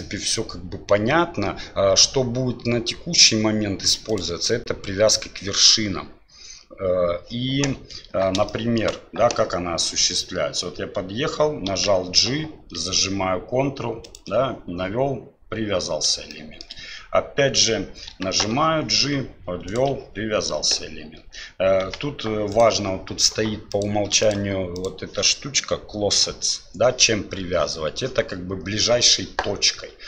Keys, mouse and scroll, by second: 8.6 shift+middle click, 11.7 g, 16.3-16.6 shift+middle drag, 18.1 g, 21.8 g, 23.7 click, 24.8-27.6 drag.